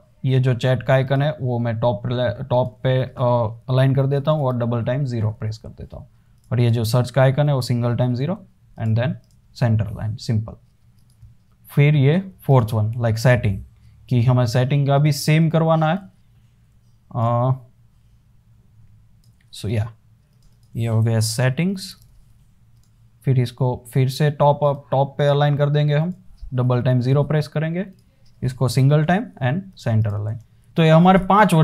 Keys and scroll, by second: 4.5 typing, 7.8 0, 9.7 super+s, 13.0 super+d, 21.1-22.9 typing, 27.0 typing, 29.1 0, 30.5 super+s.